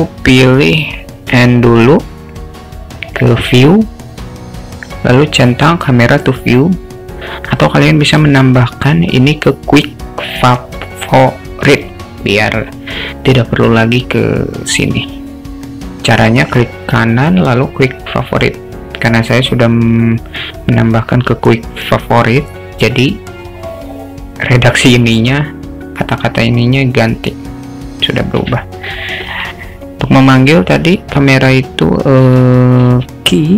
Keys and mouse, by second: 1.3 n, 3.1 click, 16.9-27.2 right drag, 28.4 n, 32.8 q.